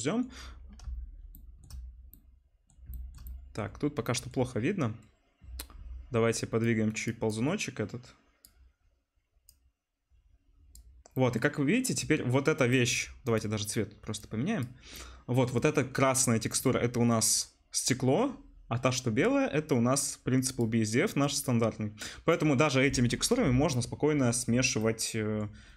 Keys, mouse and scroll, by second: 0.1 middle click, 0.2 middle click, 0.3-2.1 middle drag, 2.8-13.3 shift+middle drag, 13.3-14.9 drag, 14.9-16.3 middle drag, 16.3 right click, 16.4 middle click, 16.5 right click, 16.6-19.4 middle drag, 19.4-23.2 drag, 24.4 click, 25.1 click.